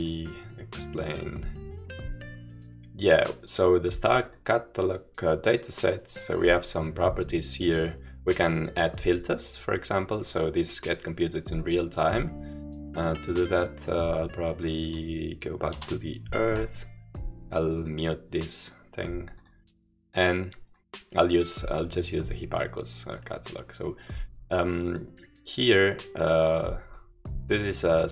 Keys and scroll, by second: 15.8 Home.